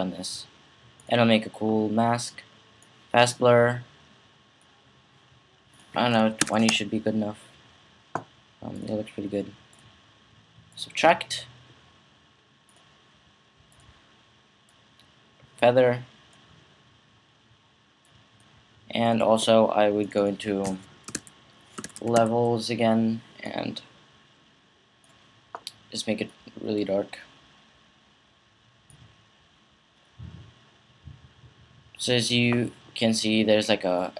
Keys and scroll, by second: 6.2 typing, 20.9-22.4 typing.